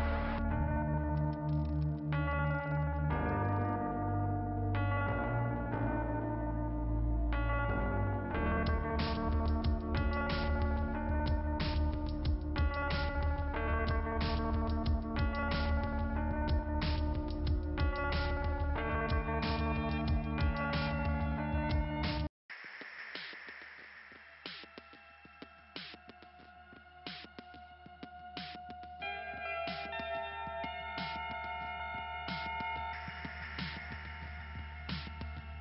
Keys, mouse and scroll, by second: 23.1 click, 24.3 scroll down 1, 26.1 click, 26.8 click, 27.7 click, 31.3 click, 31.5 click, 32.6 scroll down 1, 34.8 click, 35.1 click.